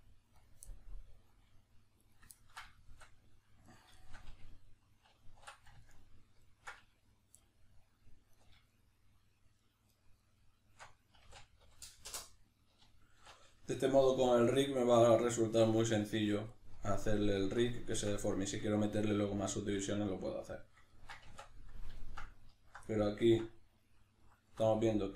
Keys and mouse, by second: 0.5 click, 0.7-2.0 middle drag, 2.0 right drag, 2.4-3.7 ctrl+middle drag, 3.7 ctrl+right click, 4.0-8.3 shift+middle drag, 5.1 alt+q, 8.3 alt+right click, 8.7 alt+shift+right click, 9.6 alt+shift+right click, 9.9 alt+shift+right click, 10.2 alt+shift+right click, 11.1 s, 16.1-16.5 drag, 16.5-17.9 middle drag, 17.9 Tab, 18.3-22.6 middle drag, 21.3 Tab, 22.6 alt+right click, 22.6-24.3 middle drag, 24.3 alt+right click, 24.4-25.1 middle drag.